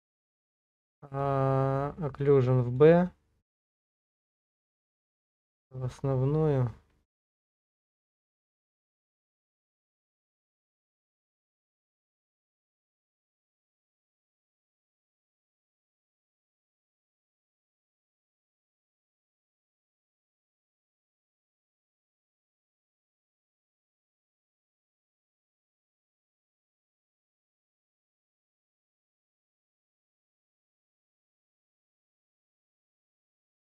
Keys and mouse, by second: 4.0-6.0 drag, 11.0-16.0 drag, 16.7-28.3 middle drag, 29.3-30.9 middle drag, 32.0 middle click.